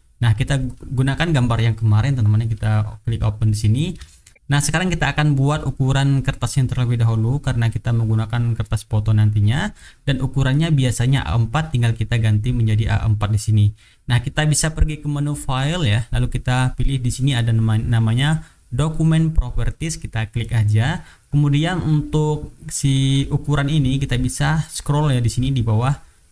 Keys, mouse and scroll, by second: 1.2 click, 2.5 click, 3.6 middle click, 4.2 shift+right click, 15.7 click, 19.8 click, 25.3-26.3 drag.